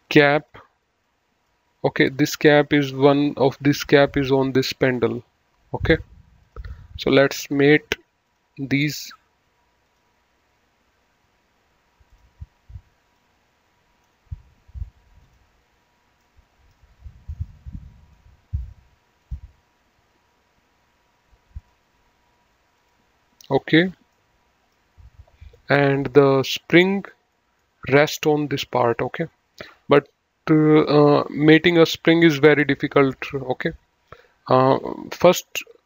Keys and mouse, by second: 3.6 click, 5.7 click, 8.4 click, 9.8 click, 12.1 click, 15.2 click, 16.1 middle click, 17.2 middle click, 19.1 click, 21.6 click, 22.8 click, 24.1 middle click, 25.5 middle click, 27.3 middle click.